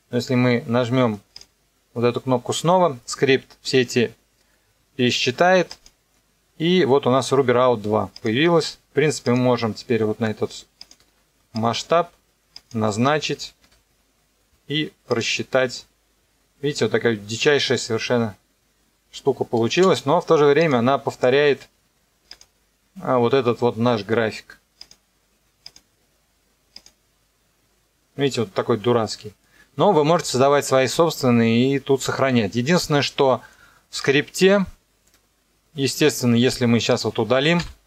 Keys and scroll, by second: 13.6 KP_0, 15.7 KP_0, 19.8 space, 37.6 Delete.